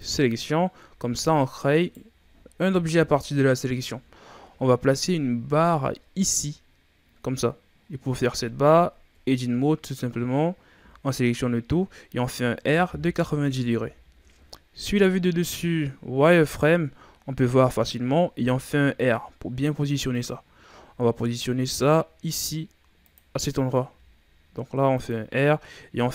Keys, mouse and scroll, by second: 0.7 Tab, 1.0-1.7 scroll down 2, 1.7 right click, 2.8 KP_1, 4.3-4.9 shift+scroll up 1, 4.9-7.8 scroll up 5, 7.8-9.1 scroll down 4, 9.1 Tab, 10.7 a, 12.5 r, 14.7 KP_7, 16.3 z, 18.3 r, 20.4-21.1 ctrl+scroll down 4, 21.1-21.6 scroll up 3, 21.6 g, 23.8 r, 25.8 s.